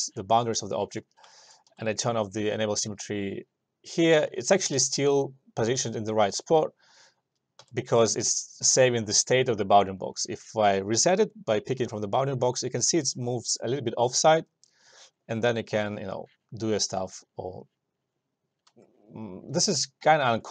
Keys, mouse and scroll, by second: 1.3 click, 1.5 alt+middle click, 1.8 s, 2.6 click, 4.4 alt+middle click, 7.7 s, 9.0-13.6 drag.